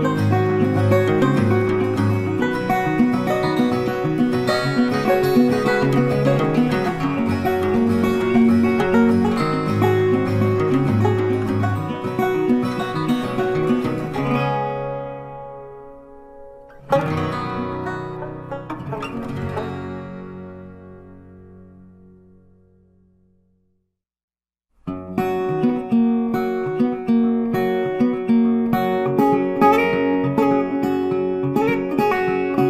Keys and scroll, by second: 2.8 ctrl+t, 15.6 ctrl+d, 25.6 ctrl+t.